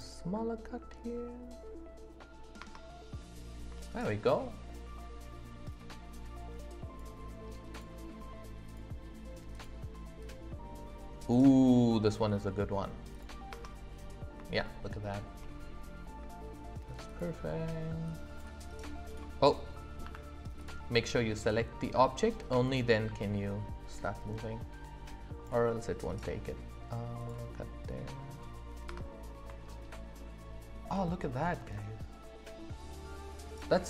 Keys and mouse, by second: 2.6 space, 3.9 shift+middle drag, 6.2-7.8 drag, 8.6 click, 9.5 click, 10.2 click, 11.2 click, 13.1 click, 13.5 space, 14.6 shift+click, 17.0 click, 18.1-19.1 drag, 20.0 Escape, 20.6 click, 22.7 click, 27.2 click, 28.9 space, 29.6-30.8 shift+drag, 31.3-33.4 middle drag.